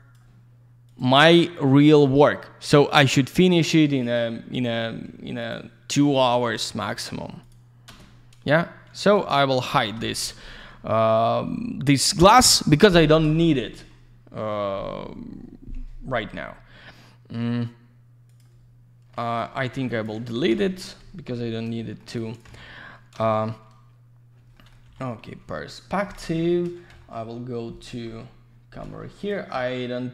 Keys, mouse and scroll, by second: 0.9 click, 1.0 click, 1.8 click, 1.9 click, 3.3 click, 4.0 click, 5.4 ctrl+click, 6.9 ctrl+click, 7.4 ctrl+click, 7.9 ctrl+space, 9.1 alt+middle click, 9.9 F4, 18.3 click, 18.4 click, 18.6-19.0 scroll down 1, 19.1 middle click, 19.5 middle click, 19.7 middle click, 19.9 click, 20.0 double click, 20.4 Delete, 21.8 alt+middle click, 22.1 alt+z, 22.2 click, 22.4 c, 23.2 shift+f, 24.5 middle click, 24.7 middle click, 26.4 F3, 26.8 middle click, 26.9 middle click, 28.0 F3, 29.2 click, 29.3 click.